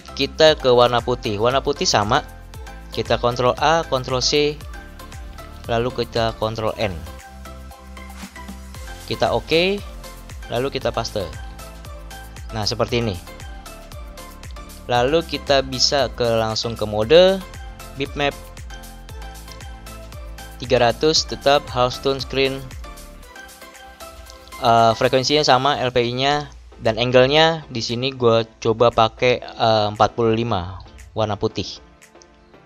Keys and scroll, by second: 3.5 ctrl+a, 4.2 ctrl+c, 6.6 ctrl+n, 9.4 Return, 11.4 ctrl+v, 30.4 4, 30.7 5.